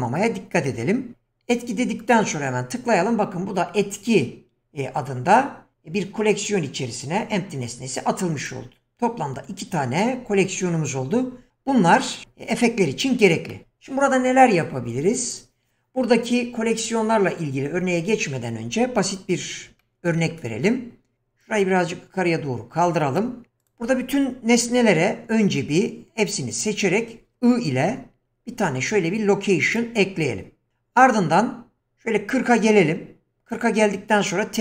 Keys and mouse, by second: 13.5 middle click, 21.5-23.3 drag, 25.6 q, 28.2 i, 30.7-33.5 drag.